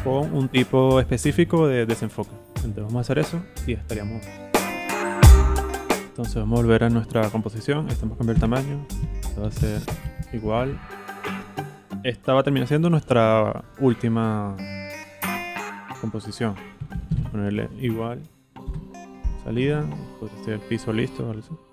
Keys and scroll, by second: 8.3 super+k, 9.0 super+Right, 9.4 shift+Left, 16.5-17.7 typing, 18.6 Return.